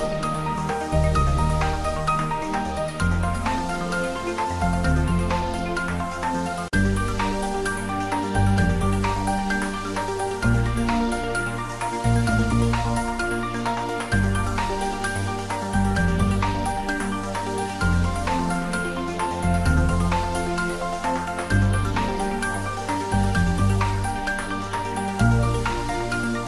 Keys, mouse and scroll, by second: 0.6 click, 0.9 s, 2.0 click, 3.6 shift+z, 3.9 click, 4.2 shift+z, 4.8 g, 6.5 click, 6.9 s, 8.2 click, 8.6 s, 8.7 z, 9.6 click, 10.1 shift+z, 11.7 z, 14.2 g, 14.4 z, 16.4 click, 16.8 g, 16.9 z, 18.0 x, 18.3 Left, 21.1 click, 22.1 g, 22.4 x, 22.7 Right, 23.7 click, 24.2 scroll down 1, 24.6-26.1 middle drag, 26.1 shift+z.